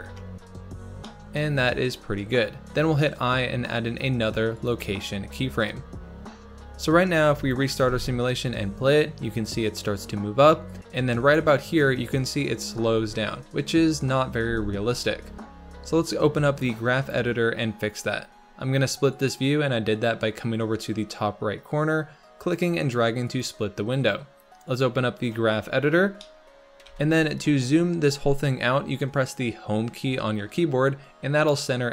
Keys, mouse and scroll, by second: 0.7 scroll down 1, 1.0 shift+middle click, 1.7-3.0 scroll up 1, 3.0-4.7 scroll up 1, 5.5-6.1 scroll down 1, 6.1-7.3 scroll down 1, 7.3 click, 7.8 space, 10.8-12.6 drag, 12.6 space, 16.0-17.8 drag, 17.8-18.8 scroll up 3, 18.8-31.9 drag.